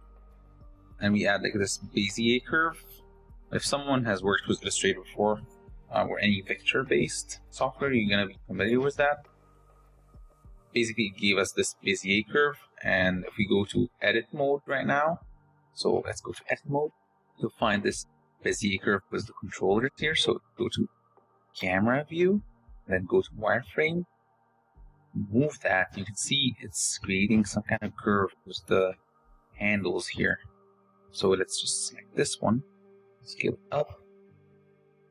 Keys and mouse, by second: 6.2 g, 7.3 r, 8.6 click, 9.2 g, 13.8 click, 14.8 click, 16.4 shift+Tab, 16.5 shift+click, 17.2 click, 20.6 KP_0, 22.0 z, 23.1 g, 24.6 r, 26.3 g, 27.4 s, 28.7 g, 29.8 g, 31.5 s.